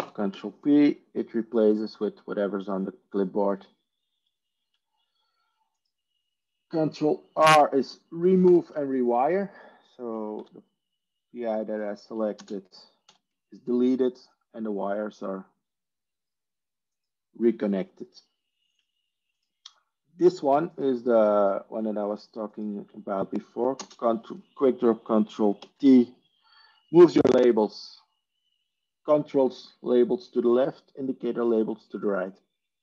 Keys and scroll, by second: 7.3 ctrl+space, 8.3 ctrl+r, 10.2 ctrl+r, 10.9 ctrl+z, 12.7 ctrl+space, 13.0 ctrl+r, 23.6 ctrl+space, 26.5 ctrl+t.